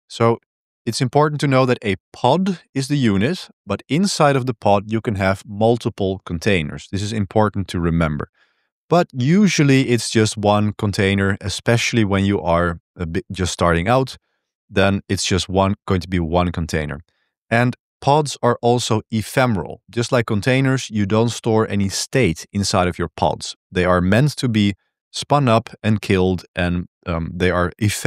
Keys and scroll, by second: 0.1 j, 8.3 j, 8.7 k, 14.2 j, 14.6 k, 16.7 j.